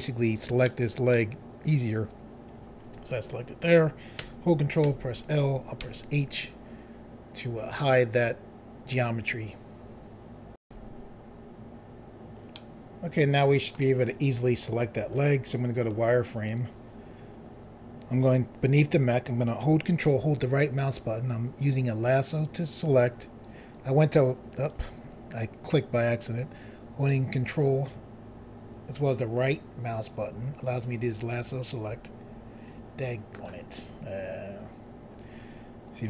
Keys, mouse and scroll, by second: 1.2 middle click, 2.0 click, 4.9 ctrl+l, 5.8 h, 10.6 Pause, 12.5 middle click, 16.4 click, 20.0 ctrl+right click, 23.4 ctrl+click, 26.0 ctrl+right click, 34.7 scroll up 1.